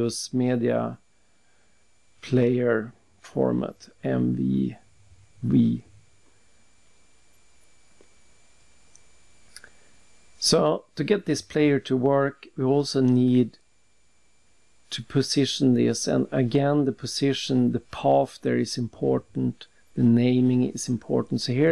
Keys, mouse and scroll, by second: 2.9 click, 4.9 alt+Tab, 8.0 click, 9.0 click, 9.0 click, 9.8 click, 10.7 click, 10.8 click, 11.5 click, 15.6 click, 15.7 double click, 16.8 click, 18.2 click, 19.2 typing, 21.2 click.